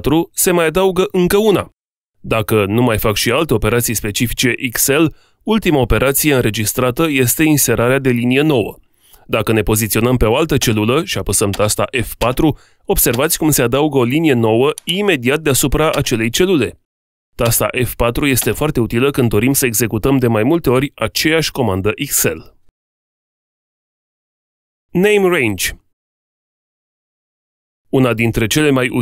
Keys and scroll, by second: 10.5 F4.